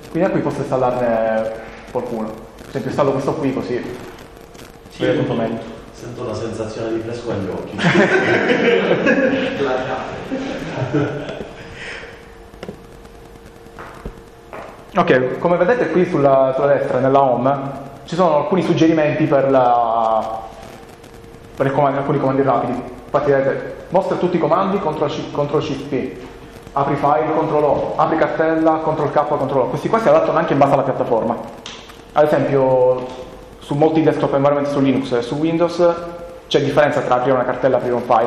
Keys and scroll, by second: 0.6 Down, 1.9 Up, 4.5 Return.